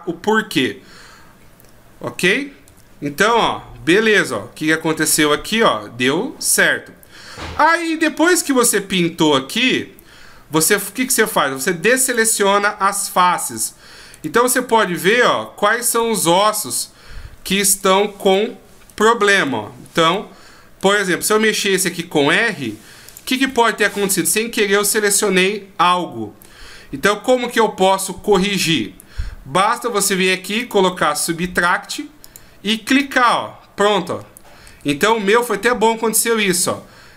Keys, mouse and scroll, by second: 2.6 r, 12.0 click, 13.4 right click, 14.1 right click, 14.6 right click, 15.0 right click, 15.8 right click, 16.5 right click, 16.9-17.6 scroll down 1, 17.6 right click, 17.6-18.2 scroll down 1, 18.2 right click, 18.9 right click, 19.3 right click, 20.0 right click, 20.8 right click, 21.7 r, 23.5 middle click, 30.6 click, 32.2 click, 33.0 click, 34.6 ctrl+z, 35.1 ctrl+z.